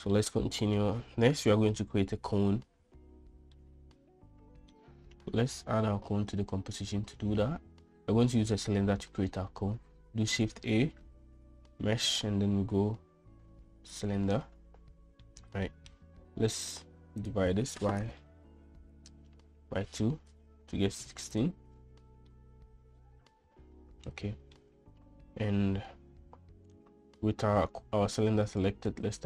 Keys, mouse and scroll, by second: 0.2-0.8 middle drag, 2.8 middle click, 3.9-5.0 middle drag, 10.6 shift+a, 15.6 middle click, 17.0-21.8 drag, 22.6-24.9 middle drag.